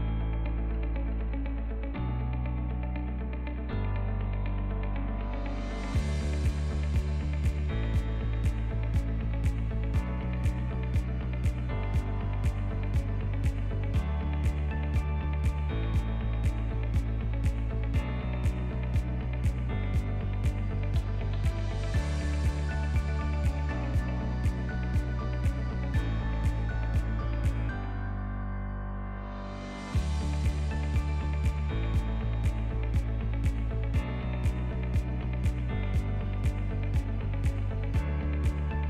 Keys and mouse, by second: 0.3 click, 1.3 i, 2.4 i, 3.4 Tab, 3.8-4.4 middle drag, 4.5 ctrl+middle drag, 5.1-6.1 right drag, 6.3 ctrl+s, 6.5-6.9 shift+middle drag, 7.7 ctrl+middle click, 8.2 ctrl+s, 8.3-8.7 middle drag, 8.9 shift+middle click, 10.3-10.7 drag, 11.3-11.7 middle drag, 12.1 shift+click, 13.3 ctrl+p, 14.7 ctrl+click, 15.5-15.9 shift+drag, 16.3 shift+middle click, 16.8 ctrl+middle click, 17.3 /, 17.7-18.3 middle drag, 18.5 shift+middle drag, 19.1-19.5 ctrl+middle drag, 20.7-25.2 drag, 26.8 Tab, 27.5 Tab, 28.5-29.1 drag, 29.9-31.1 middle drag, 31.9-34.3 shift+drag, 35.2 Tab, 36.3 ctrl+r.